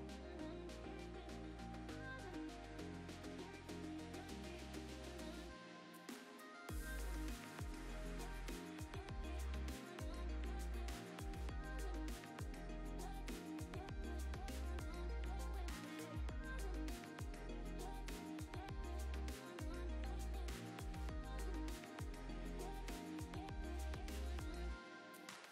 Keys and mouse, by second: 0.1-2.5 shift+drag, 3.2 click, 3.4 click, 3.5 g, 4.3 shift+s, 5.0 s, 5.4 click, 5.6-6.1 middle drag, 6.2 shift+middle drag, 6.4 middle click, 7.8 shift+right click, 7.9 shift+a, 9.3 Tab, 9.6 g, 10.1 Tab, 10.2 s, 10.8 right click, 11.4 shift+g, 13.0 KP_0, 13.5 g, 14.7 click, 14.8 g, 17.0 s, 17.3 g, 17.7 g, 18.6 click, 18.7 g, 19.2 alt+d, 19.6 s, 20.1 g, 20.9 shift+click, 21.0 g, 21.9 click, 22.3 drag, 22.5 alt+d, 23.2 s, 24.5-25.5 typing, 24.8 click.